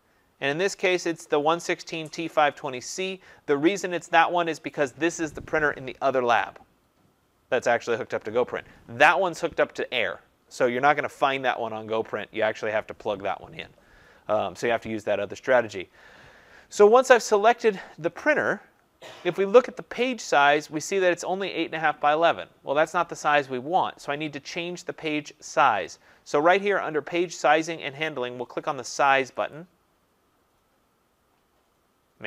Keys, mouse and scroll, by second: 4.6-12.7 drag, 29.5 click.